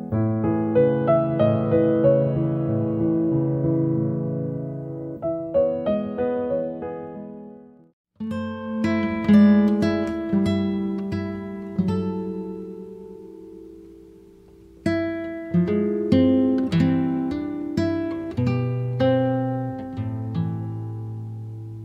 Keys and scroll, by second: 1.3 t, 3.8 6, 4.1 0, 4.6 Return, 5.3 space, 8.8-10.7 typing, 14.5 e, 16.5 t, 19.9 1, 20.4 0, 20.8 Return.